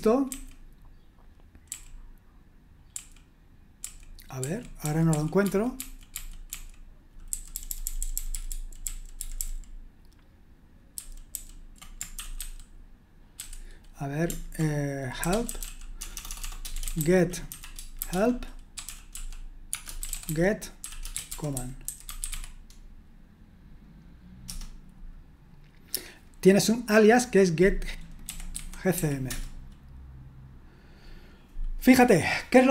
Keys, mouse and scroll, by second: 0.3 ctrl+d, 1.6 ctrl+d, 2.9 ctrl+d, 3.8 ctrl+d, 4.4 ctrl+d, 4.8 ctrl+d, 5.1 ctrl+d, 5.4 ctrl+d, 5.7 ctrl+d, 6.1 ctrl+d, 6.5 ctrl+d, 7.3 ctrl+u, 7.5 ctrl+u, 7.7 ctrl+u, 7.8-9.2 ctrl+u, 12.1 ctrl+j, 15.2 c, 16.1 c, 16.7 c, 19.9-22.7 typing, 24.4 Return, 28.0-29.4 typing, 32.6-32.7 scroll up 1.